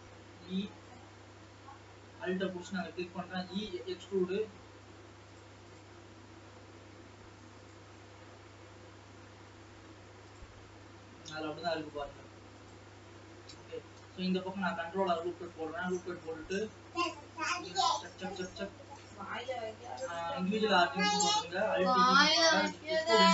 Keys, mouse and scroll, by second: 0.3 e, 1.4 scroll up 2, 1.7 alt+a, 2.7 alt+click, 3.4 e, 4.2 s, 5.8 click, 6.2 scroll down 2, 6.4 e, 8.1-10.6 middle drag, 13.2-14.8 middle drag, 14.8 ctrl+r, 16.2-17.2 middle drag, 17.6-18.6 drag, 19.9-21.0 drag, 21.0 middle click, 21.8 alt+e, 23.0 alt+e.